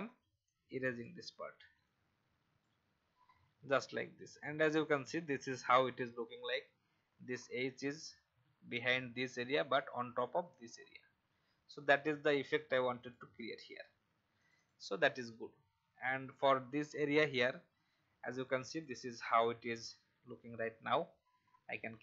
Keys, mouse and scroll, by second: 0.4-3.4 drag, 3.8 alt+scroll down 1, 4.4 alt+v, 4.8 click, 5.5 alt+scroll down 1, 12.0 alt+scroll down 1, 13.0 click, 13.8 alt+scroll down 1, 14.4 click, 16.0 alt+scroll down 1, 17.0 click.